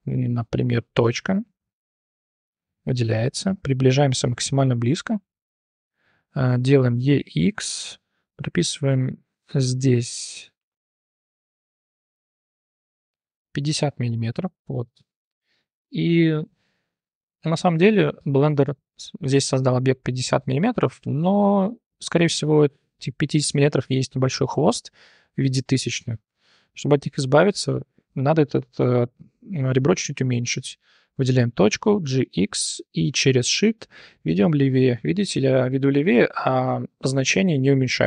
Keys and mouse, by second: 1.0 m, 2.1 1, 2.3 click, 4.0 i, 5.5 shift+click, 6.9 e, 9.7-11.8 drag, 13.7 2, 13.9 click, 26.3 1, 26.6 click, 30.5 shift+drag, 31.9 g.